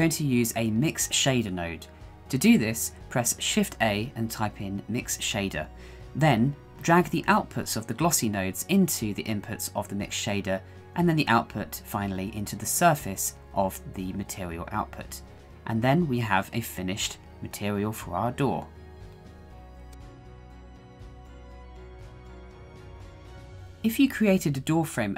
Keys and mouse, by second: 6.8-8.7 drag, 10.1 click, 11.7-13.4 drag, 13.8-15.5 drag, 15.5-16.1 middle drag, 15.5 g, 15.5 y, 18.2-18.6 middle drag, 19.2-21.5 middle drag, 21.5-24.0 middle drag.